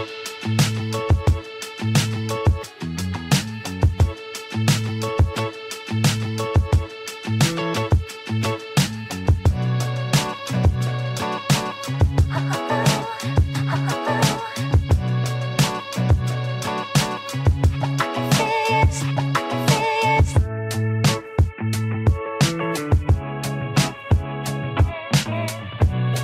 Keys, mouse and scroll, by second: 9.5-14.1 drag, 14.1 alt+scroll down 1, 14.9 space, 15.2 click, 15.4 space, 18.0 space, 19.6 space, 20.3 click, 20.5 space, 21.4 click, 21.5 space, 22.4 space, 22.8 click, 24.1 alt+scroll down 1.